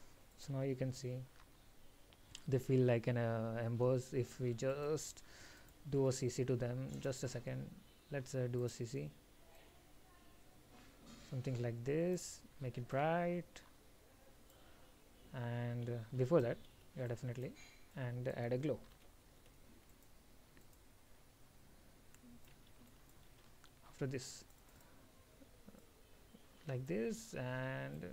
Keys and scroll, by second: 16.2 ctrl+x, 16.9 ctrl+v, 22.9 ctrl+x, 23.5 ctrl+v.